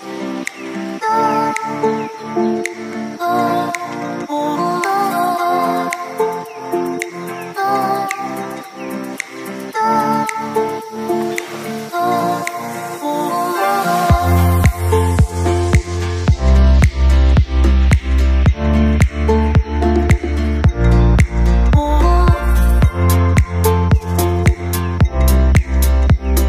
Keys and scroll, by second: 13.2 ctrl+z.